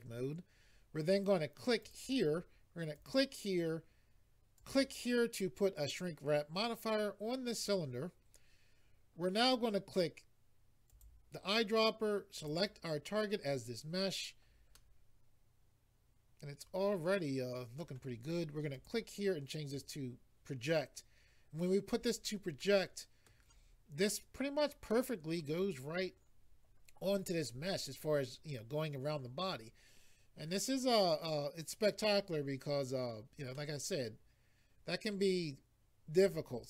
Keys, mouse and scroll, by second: 1.8 click, 3.0 click, 4.6 click, 10.9 click, 12.4 click, 14.7 middle click, 18.7 click, 19.7 click, 22.6 middle click, 24.9 middle click, 33.5 middle click.